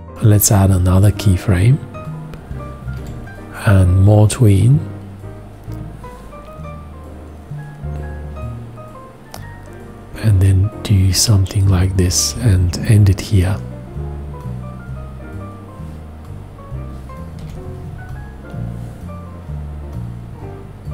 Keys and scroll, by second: 3.0 4, 12.3 x, 17.4 5.